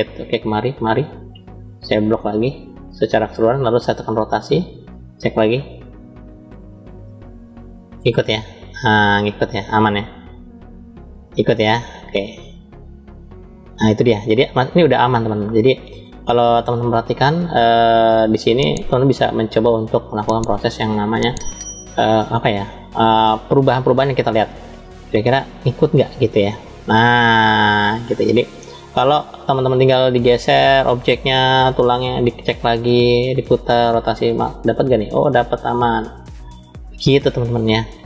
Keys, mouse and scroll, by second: 0.5 shift+click, 1.7-2.9 shift+drag, 4.0 click, 5.2 click, 13.6 ctrl+z, 14.3-15.9 middle drag, 16.7 click, 17.4 click, 19.8 click, 20.9 click, 22.6 ctrl+z, 23.1-23.7 middle drag, 24.4-28.0 middle drag, 28.4-30.0 middle drag, 31.3 click, 33.1 click, 34.2 click, 35.8 ctrl+z, 36.5 click, 37.5-38.0 middle drag.